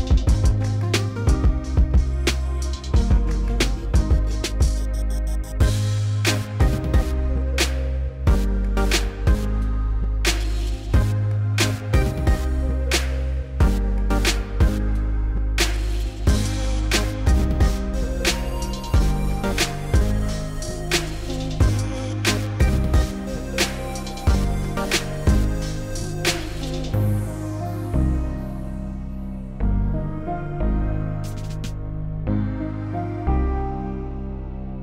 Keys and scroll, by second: 0.6 s, 5.8 1, 16.0 3, 16.4 s, 20.3 2, 26.4 s, 31.9 s, 34.7 s.